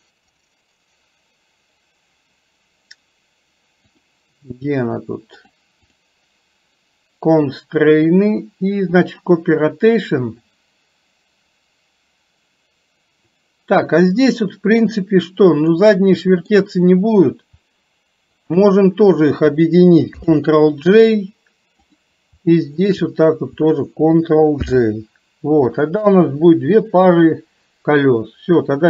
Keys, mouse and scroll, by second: 5.5 click, 7.4-9.4 drag, 15.9 middle click, 18.4 shift+click, 20.3 ctrl+j, 21.9 click, 24.7 ctrl+j, 26.2 KP_3.